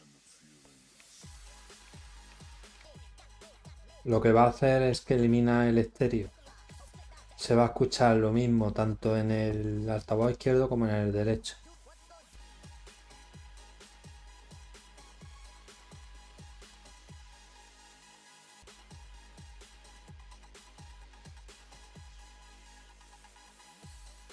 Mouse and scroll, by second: 17.4 click.